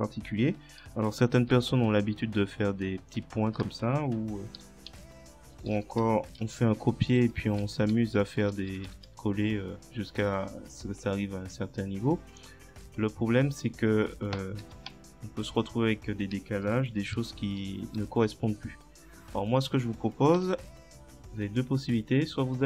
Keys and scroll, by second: 0.8 space, 1.6 shift+., 4.9 shift+Left, 6.4 ctrl+c, 7.6 ctrl+v, 14.9 Return, 17.2 ctrl+z, 20.4 Delete.